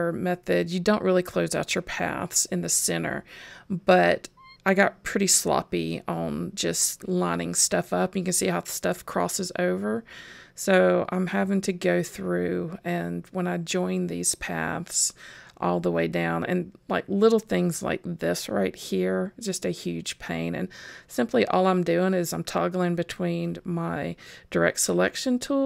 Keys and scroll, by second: 0.9 super+j, 9.7 super+j, 13.6 super+j.